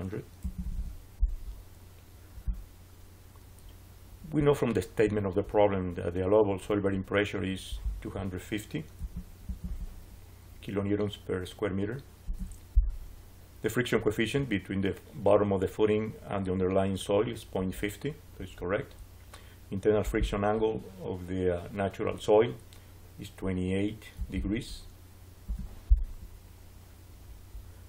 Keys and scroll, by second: 0.0-1.0 typing, 8.6-10.1 typing, 12.1 Return, 23.8-24.7 typing, 25.3 Return.